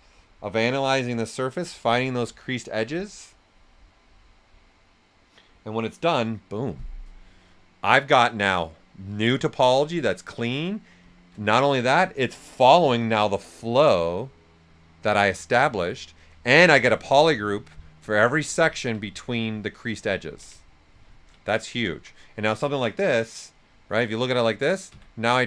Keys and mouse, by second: 7.1-10.3 right drag, 15.4 right click, 16.5 ctrl+shift+click, 19.0 alt+shift+right click, 19.7 right click, 20.1 ctrl+shift+click, 20.6 ctrl+shift+click, 21.4 shift+right click, 23.8 shift+f, 24.2 right click, 24.9 d.